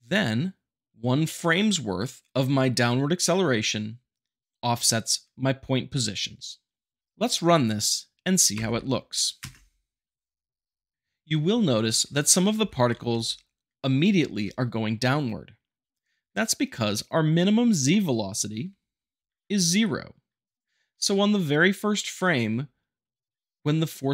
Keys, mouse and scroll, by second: 6.6 middle click, 8.6 shift+Left, 9.4 space, 12.6 shift+Left, 13.0 space, 14.2 space, 17.5 middle click, 17.9-19.9 shift+middle drag, 22.2-23.2 shift+middle drag.